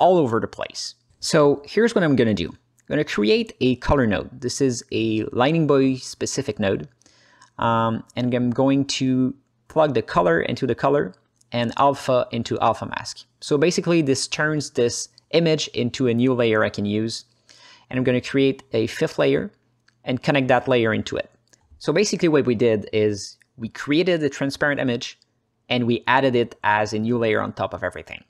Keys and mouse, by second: 1.6 drag, 2.1 middle click, 2.5 ctrl+alt+middle click, 3.5 shift+a, 7.7 click, 8.9-9.6 drag, 9.7 click, 10.1 middle click, 10.4-10.9 alt+middle drag, 11.3 h, 11.7 ctrl+alt+middle click, 12.1 click, 13.4-14.3 drag, 14.6 ctrl+alt+middle click, 14.9 alt+middle click, 15.4 click, 15.9 h, 17.1 click, 18.1-19.2 drag, 19.9-21.0 drag, 21.9 h, 22.1-22.5 drag, 22.6 alt+middle click, 23.1-24.3 drag, 24.4 drag, 24.8 click, 25.6 alt+middle click, 26.0 click, 26.6 ctrl+c, 27.2 ctrl+space.